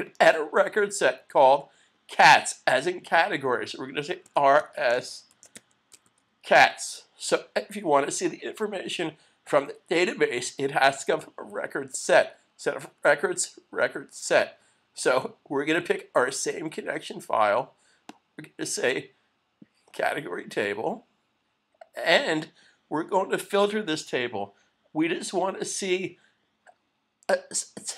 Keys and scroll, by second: 5.3 shift+c.